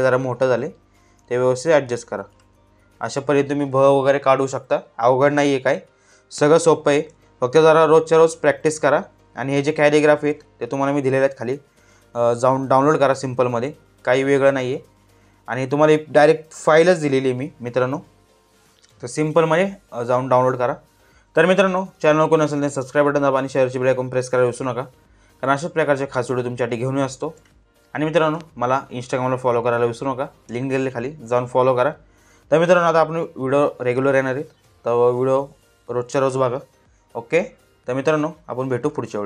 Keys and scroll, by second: 25.0 space, 28.4 space.